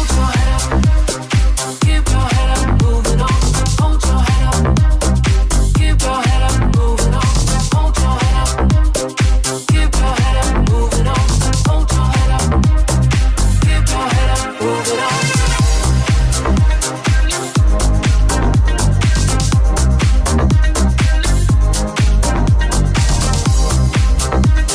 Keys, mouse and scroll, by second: 4.2 right click, 4.3-24.7 middle drag, 5.6 Tab, 6.8 /, 17.2 right click.